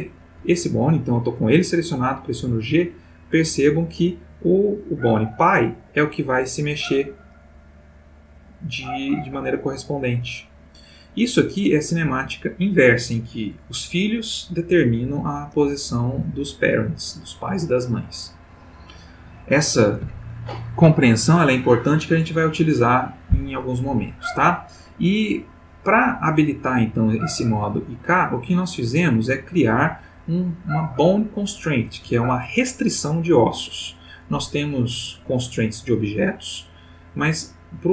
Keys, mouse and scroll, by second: 0.4 Escape, 1.3 click, 2.4 g, 11.3 Escape, 28.2 click, 35.2 click.